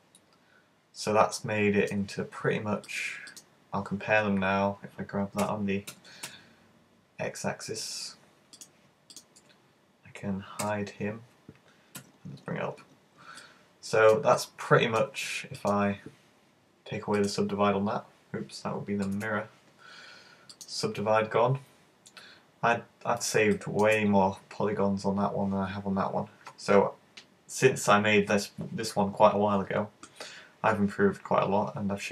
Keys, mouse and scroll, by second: 2.9 click, 4.2-4.6 scroll down 3, 5.5 g, 8.6 click, 9.2 right click, 10.7 super+h, 12.0 `, 12.9-13.5 scroll up 2, 13.5 shift+middle click, 14.4 middle click, 15.6 right click, 17.2 click, 19.2 super+z, 20.6 click, 21.7-22.1 scroll down 2, 22.2 scroll up 3, 22.7-23.4 scroll down 1, 23.5 shift+middle click.